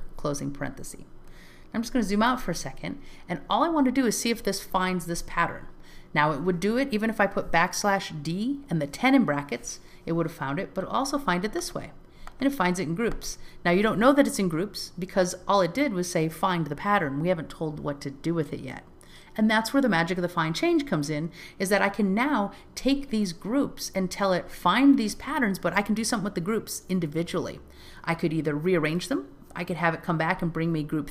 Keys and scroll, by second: 1.8 alt+z.